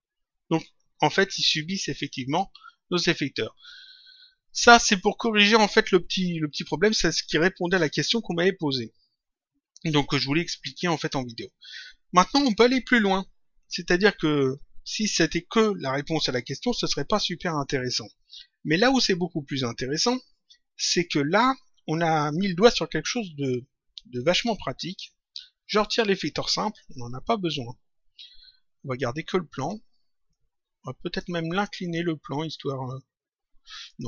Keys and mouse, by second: 2.0 click, 4.4 click, 24.3 click, 25.7 click, 26.4 Delete, 28.9 click, 30.2 click, 31.7 click, 33.8 click.